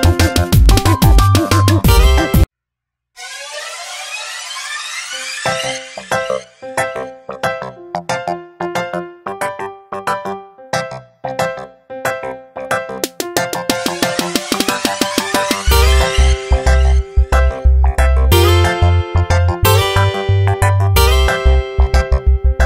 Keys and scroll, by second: 3.8 space, 8.7 ctrl+z, 9.2 space, 11.2 ctrl+Return, 11.7 Delete, 12.2 ctrl+d, 14.2 v, 19.6 p.